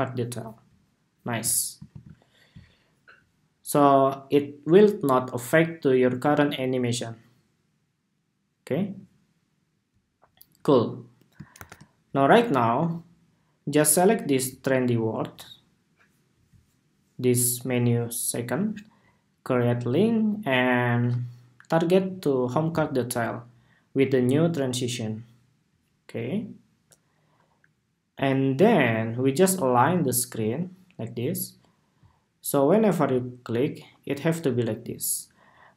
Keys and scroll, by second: 1.6 super+s, 2.8 super+s, 11.2 super+=.